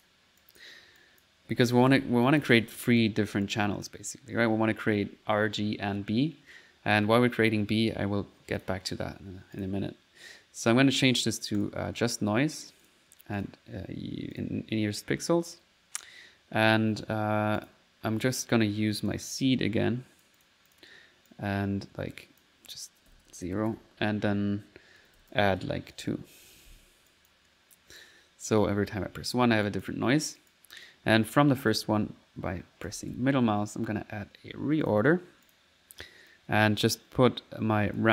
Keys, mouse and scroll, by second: 0.0-1.7 drag, 1.9 ctrl+z, 2.3-4.2 ctrl+drag, 6.5 middle click, 8.6 click, 9.6 click, 11.6 click, 12.8 click, 13.4 click, 14.4 click, 15.5 click, 17.6 click, 19.1-22.5 drag, 27.1 click, 27.5 middle click, 28.3 middle click, 28.7 typing, 29.7 click, 30.3 click, 31.7 middle click, 32.1-33.5 typing, 34.9 click, 35.5 click, 36.3-38.1 drag.